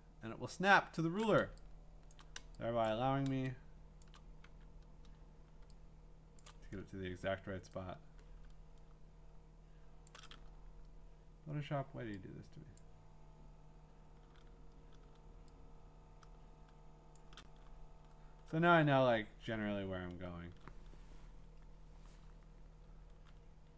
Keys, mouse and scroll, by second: 1.3-2.4 shift+click, 2.1 click, 2.4 click, 2.9 click, 3.1-4.0 f, 4.0 click, 4.1 click, 4.2 click, 4.5 f, 5.6-6.4 f, 6.4 click, 6.4 click, 6.5 click, 10.1 shift+click, 12.8 click, 14.2 click, 16.2 click, 17.2 shift+click, 17.7-19.6 scroll, 19.6 scroll, 22.9-23.7 scroll.